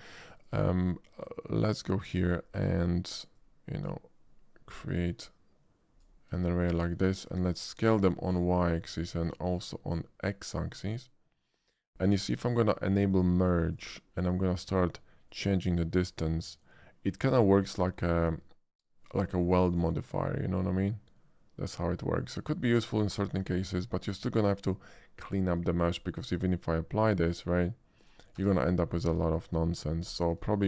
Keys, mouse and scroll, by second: 0.4 shift+click, 1.8 shift+click, 2.5 middle click, 3.3-3.9 drag, 4.8-6.0 drag, 6.4 shift+middle click, 8.1 shift+click, 10.5-11.5 drag, 12.0 shift+middle click, 13.2 shift+click, 13.7 shift+click, 15.3-24.1 drag, 25.7 shift+middle click, 27.5 shift+click, 28.0 shift+click, 28.3 Tab, 28.8 middle click, 29.7 middle click, 30.4 shift+middle click.